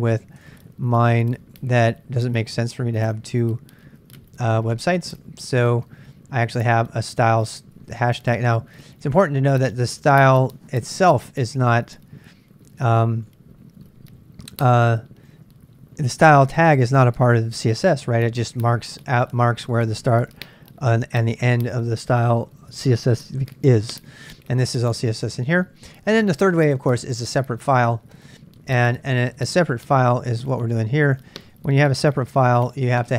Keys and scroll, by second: 0.1 ctrl+a, 0.2 ctrl+a, 0.5 super+Tab, 2.7 super+Tab, 3.1 super+Tab, 5.2 Return, 5.9-17.1 typing, 24.1 j, 24.6 j, 25.4 shift+z, 25.6 shift+z, 26.8-33.1 typing, 30.4 ctrl+[.